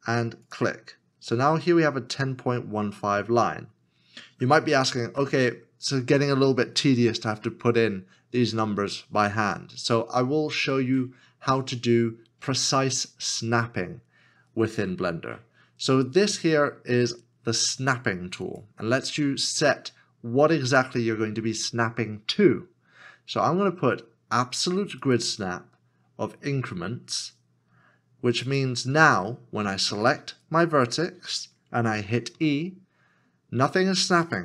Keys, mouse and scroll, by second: 32.3 5, 33.3 e.